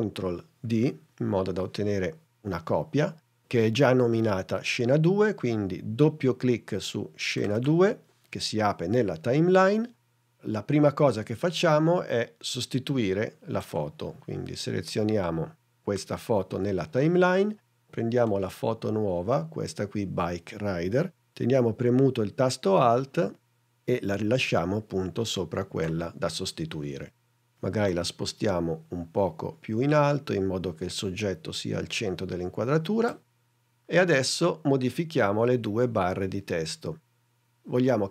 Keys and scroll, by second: 0.9 super+d.